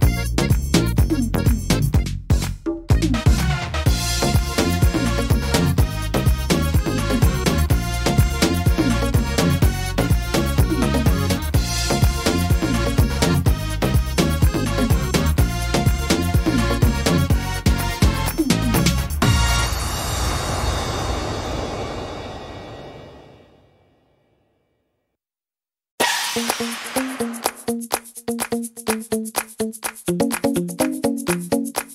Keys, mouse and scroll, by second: 2.1 right click, 2.6 right click, 3.6 click, 5.0 right click, 5.7 click, 11.6 middle click, 12.1 scroll down 2, 12.5 middle click, 13.6-14.3 scroll up 3, 14.1 middle click, 16.0 ctrl+z, 16.5 middle click, 16.8 scroll down 2, 17.3 shift+middle click, 17.7 scroll up 2, 18.8 right click, 20.3 click, 21.1 click, 21.5 click, 22.2 click, 22.7 click, 25.0 click, 26.5 click, 28.3 click, 30.6 click, 31.0 click, 31.8 click.